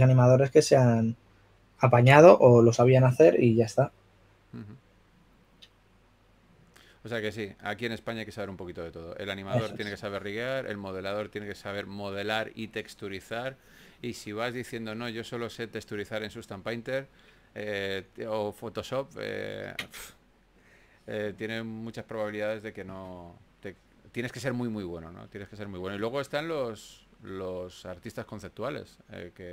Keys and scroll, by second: 17.2-18.0 typing, 19.6 super+z, 20.0 s, 22.8 super+z, 27.0 super+z, 29.0-29.5 typing.